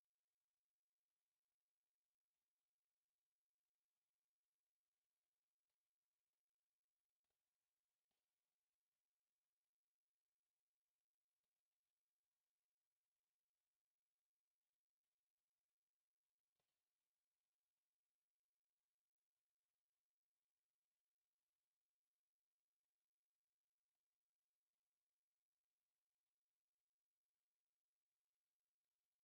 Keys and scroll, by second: 1.6 Escape, 3.4 1, 3.8 0, 3.8 Return, 6.2 Escape, 7.2 d, 8.9 space, 9.2 3, 9.4 Return, 10.0 m, 10.0 space, 10.7 Escape, 13.0-15.3 typing, 13.4 Escape, 15.0 Escape, 16.2 Escape, 16.3 e, 16.6 space, 17.4 4, 22.2 c, 23.2 Escape, 23.3 e, 23.6 space, 24.1 2, 24.6 Escape, 26.5 Escape, 26.9 c, 27.2 space, 28.2 e, 28.5 space.